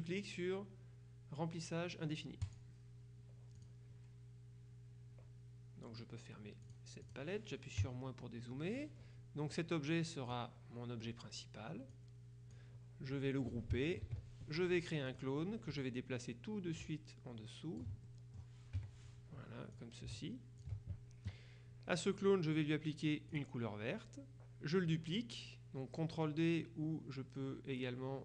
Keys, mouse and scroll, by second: 2.5 click, 3.7 click, 6.7-7.7 drag, 7.9 KP_Subtract, 9.6 click, 12.0 click, 14.1 ctrl+g, 15.1 click, 15.9-18.4 drag, 18.1 ctrl+scroll up 2, 18.9 ctrl+KP_Subtract, 19.8 click, 23.4 click.